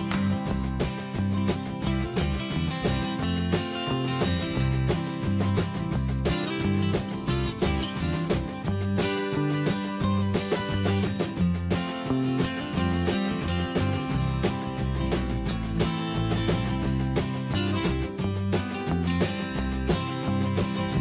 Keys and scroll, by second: 7.5 BackSpace.